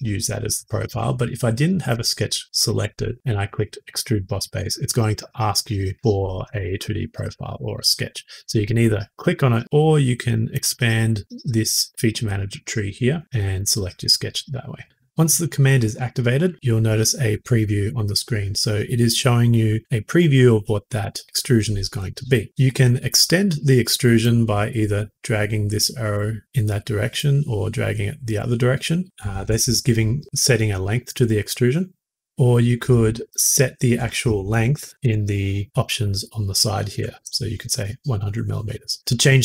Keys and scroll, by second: 0.8 Escape, 34.9 typing, 37.1 Tab.